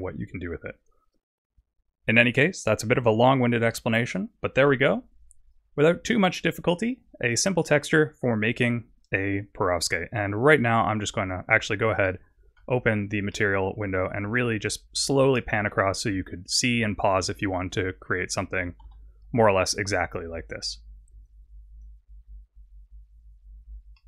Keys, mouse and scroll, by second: 5.4 click, 10.4 click, 14.5 middle click, 18.8 n, 21.2 click, 23.9 middle click.